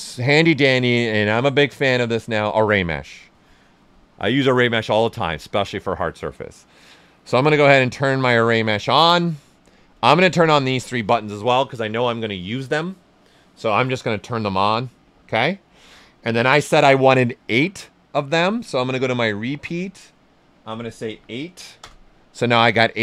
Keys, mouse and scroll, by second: 2.2 click, 7.7 click, 19.1 click, 21.1 8, 21.8 Return.